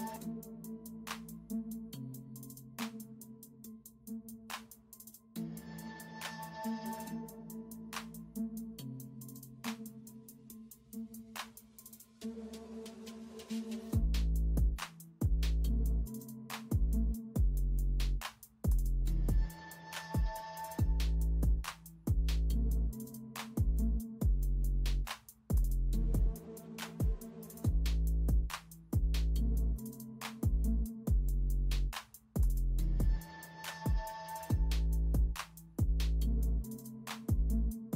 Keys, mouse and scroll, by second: 0.2 space, 1.3 ctrl+space, 2.2 space, 4.1 alt+Delete, 4.2 space, 4.6 space, 5.6 space, 6.7-7.8 typing, 13.4-14.8 typing, 17.7-20.6 typing, 22.1-23.1 typing, 24.6-26.7 typing, 28.6-29.0 typing, 30.4 space, 31.4 ctrl+m, 32.6 ctrl+m, 33.7 ctrl+d, 33.8 space, 36.6 alt+Delete, 37.3 typing.